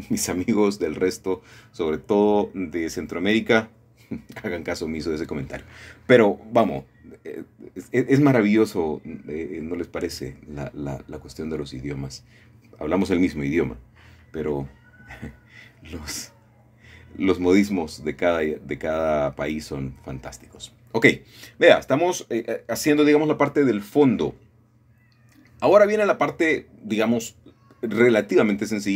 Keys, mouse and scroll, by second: 1.9 shift+click, 4.5 shift+click, 6.6-8.0 middle drag, 9.6 shift+click, 9.6 typing, 10.0 shift+middle click, 12.4 g, 13.0 x, 14.1 Escape, 15.1 g, 15.3 y, 20.7 shift+click, 21.3-21.8 scroll down 1, 21.8-24.4 middle drag, 25.4 middle click.